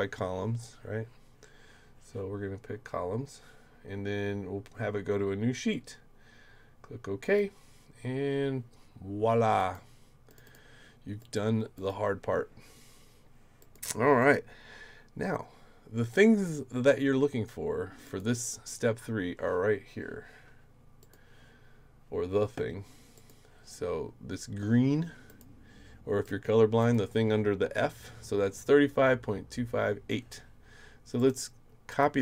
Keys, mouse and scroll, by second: 7.2 click, 9.6 click, 10.3 click, 10.4 click, 11.2 click, 11.8 click, 13.6 click, 14.2 click, 18.0 click, 21.0 click, 23.1 click, 25.3 click, 26.2 click, 26.8 click, 31.2 click, 31.9 click.